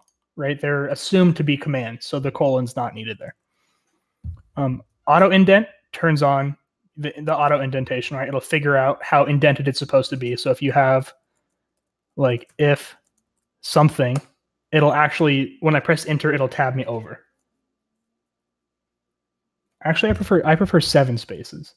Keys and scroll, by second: 3.2 Escape, 11.7-13.7 typing, 14.1 Return.